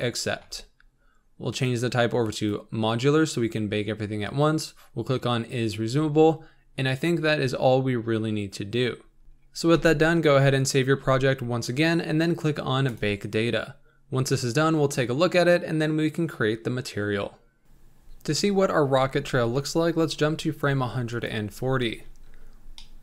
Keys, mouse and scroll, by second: 0.0-4.6 drag, 9.2-10.8 scroll down 8, 10.8 n, 17.4-18.2 scroll down 2, 22.2 click, 22.8 middle click.